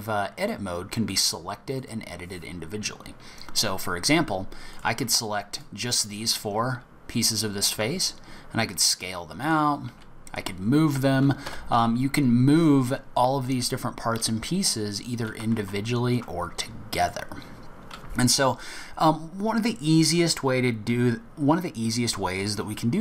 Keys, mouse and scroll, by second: 0.0 click, 1.1 click, 1.7 click, 4.7 click, 5.1-6.3 shift+click, 5.5 shift+click, 5.9 click, 7.8 s, 9.9 g, 15.5 ctrl+z, 17.0 click.